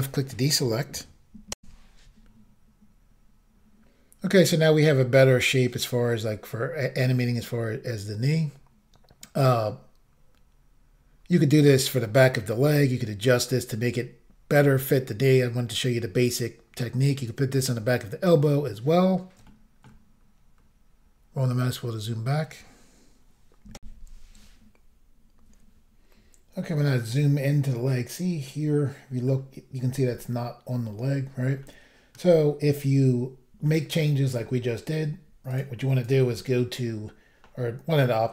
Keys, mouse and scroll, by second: 1.6 Insert, 10.1 scroll down 1, 16.7-17.6 scroll down 1, 17.6-17.9 scroll up 1, 18.4 scroll down 2, 19.5 shift+middle click, 20.5-21.1 scroll down 2, 23.8 Insert, 26.2-27.3 scroll up 3, 28.4 middle click, 31.1-31.6 scroll down 1, 31.6 middle click, 32.3 scroll up 1, 32.7-33.5 scroll down 2, 33.6 middle click, 33.8 scroll down 1, 35.5 click, 35.6 click, 36.0 click, 36.1 double click.